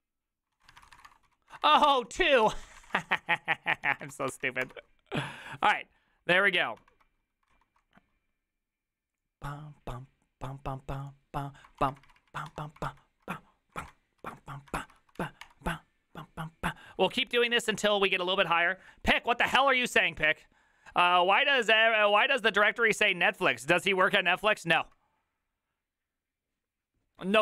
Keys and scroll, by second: 0.5-4.9 typing, 2.5 ctrl+c, 3.9 ctrl+a, 6.9 alt+[, 7.6 alt+q, 12.3 alt+r, 12.3 Right, 12.4 Right, 12.6 Escape, 13.0 alt+{, 13.9 ctrl+a, 14.3 4, 14.8 ctrl+c, 15.0 ctrl+c, 15.2 Up, 15.5 Return.